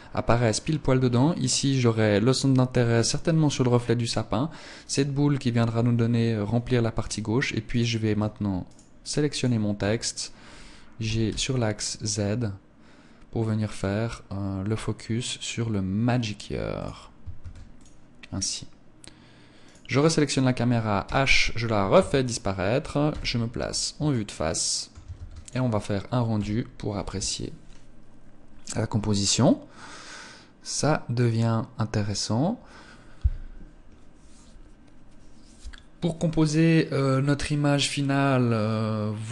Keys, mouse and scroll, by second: 7.2 right click, 8.1 shift+right click, 8.7 shift+right click, 10.4 g, 16.3 click, 16.8 ctrl+s, 19.1 right click, 20.5 h, 21.3 ctrl+s, 22.5 KP_1, 23.4 shift+middle click, 24.5 ctrl+s.